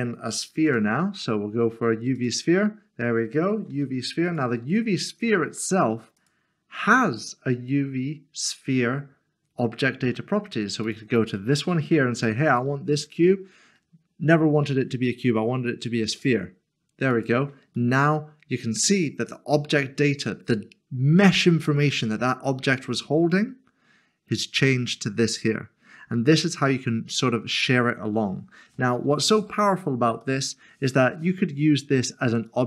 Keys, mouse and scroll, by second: 0.5 a, 2.2 click, 3.7 typing, 4.3 click, 10.9 click, 16.1 click, 17.7 click, 17.9 middle click, 28.1-28.7 scroll down 1, 28.9 middle click, 30.2 shift+middle click, 32.5 click.